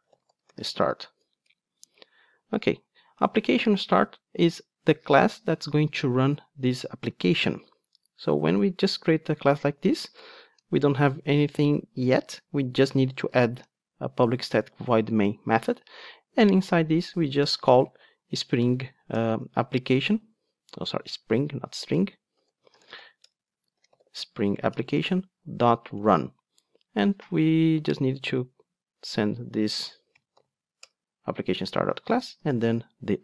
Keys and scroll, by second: 12.1 Tab, 13.6 Tab, 24.7 Return.